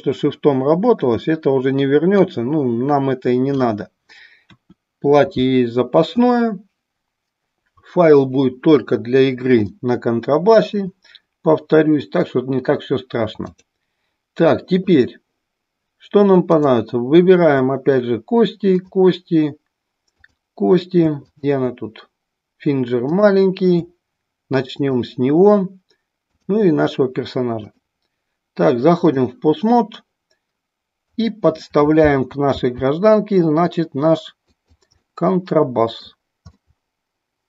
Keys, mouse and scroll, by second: 2.1-3.8 drag, 9.7-10.7 middle drag, 13.6-14.9 drag, 16.6 click, 18.9 click, 23.1 click, 27.5-29.3 drag, 31.1 click, 32.5 g, 34.6 click, 35.0-36.1 middle drag, 36.6-37.4 middle drag.